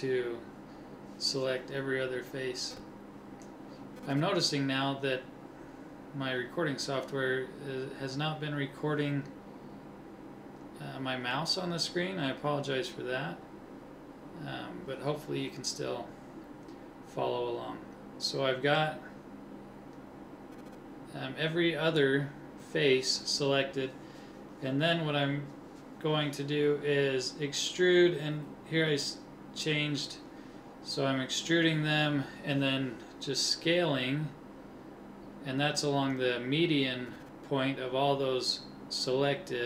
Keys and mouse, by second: 5.8-10.9 middle drag, 15.0 e, 26.3 click, 27.5-29.2 drag, 29.2 s.